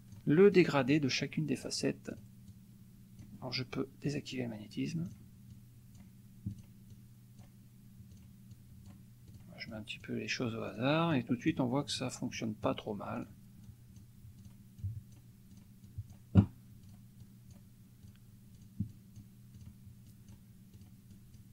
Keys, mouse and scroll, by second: 0.6 click, 0.9 click, 2.1 click, 2.5 click, 4.1 click, 5.2 click, 5.5 click, 6.5 click, 6.9 click, 8.1 click, 8.5 click, 9.3 click, 9.7 click, 10.7 click, 11.1 click, 11.9 click, 12.3 click, 13.1 click, 13.6 click, 14.5 click, 14.8 click, 15.6 click, 16.8 click, 17.2 click, 18.0 click, 18.6 click, 19.5 click, 20.0 click, 20.7 click, 21.1 click.